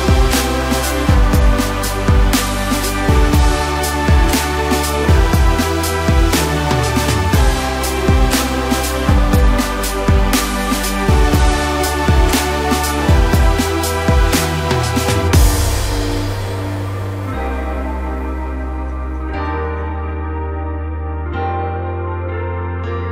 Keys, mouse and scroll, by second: 0.2 KP_Divide, 0.9-2.9 middle drag, 2.9 ctrl+KP_Add, 3.5 ctrl+KP_Add, 4.4 KP_1, 5.2 scroll up 1, 7.2-8.5 scroll down 1, 8.5 ctrl+KP_Subtract, 9.4 ctrl+KP_Subtract, 10.3 g, 13.8 Tab, 14.9 KP_Divide, 15.5-15.8 scroll down 4, 15.8-16.8 middle drag, 16.8-17.3 scroll up 3, 17.3 shift+click, 17.9-18.7 scroll down 2, 18.7 ctrl+j, 20.8 click, 21.0-21.4 scroll up 6, 21.5 scroll down 1, 21.8-23.0 middle drag, 23.0-23.1 scroll up 1.